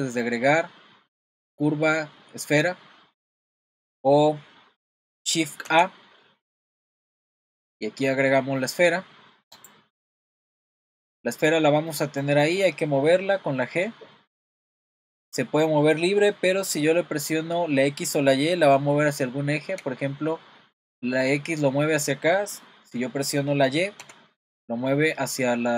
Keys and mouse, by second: 5.7 shift+a, 11.1-11.5 middle drag, 11.9-12.3 middle drag, 13.8 g.